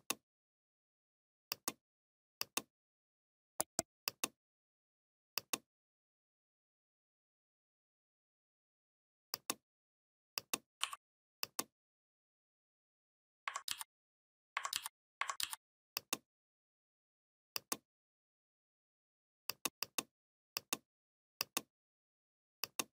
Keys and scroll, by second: 13.5 ctrl+d, 14.5 ctrl+d, 15.2 ctrl+d.